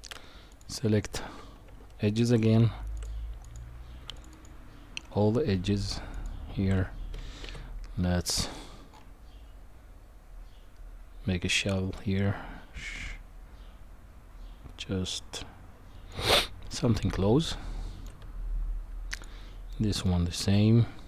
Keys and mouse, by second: 0.5 alt+shift+click, 1.7 Tab, 3.0 click, 3.4 click, 4.2 alt+shift+click, 4.3 alt+shift+click, 6.1 alt+shift+click, 7.4 ctrl+b, 16.7-18.0 middle drag, 19.7 middle click, 20.4 ctrl+b.